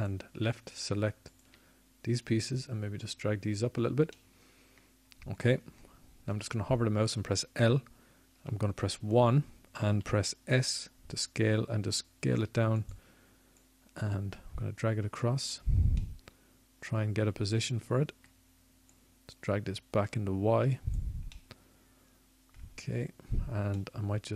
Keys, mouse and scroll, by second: 0.7-3.4 drag, 7.3 middle click, 9.4 click, 9.5 middle click, 9.9 click, 10.1-11.5 middle drag, 11.5 l, 13.6 KP_1, 15.2 s, 21.2-22.6 middle drag.